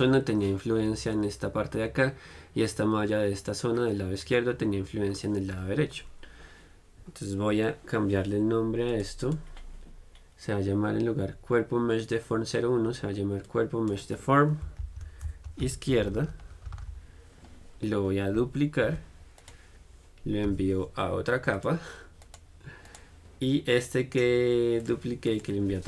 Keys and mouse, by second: 9.1-11.0 drag, 19.1 shift+d, 20.7 m, 22.5-25.8 drag.